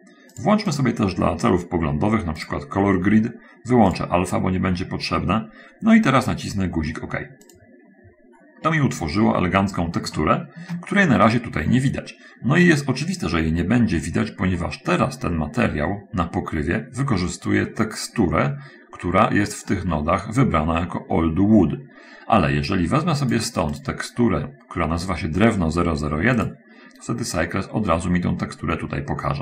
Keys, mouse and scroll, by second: 0.6 click, 2.8 click, 4.4 click, 8.6-9.0 scroll up 1, 9.2 middle click, 10.6 shift+click, 12.1-14.8 drag, 15.0 click, 15.4 middle click, 17.9-18.2 scroll up 1, 22.8-23.9 drag, 24.2 click, 26.8 click, 28.4-29.4 middle drag.